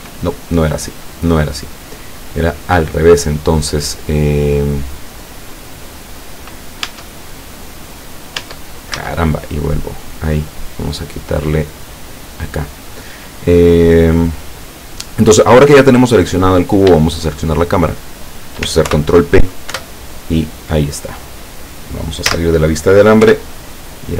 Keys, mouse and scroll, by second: 2.4 click, 4.4 right click, 6.9 Tab, 8.4 Tab, 9.4 right click, 9.4 z, 11.8 click, 17.7 shift+right click, 18.9 ctrl+shift+p, 19.8 Return, 22.3 z, 23.3 p.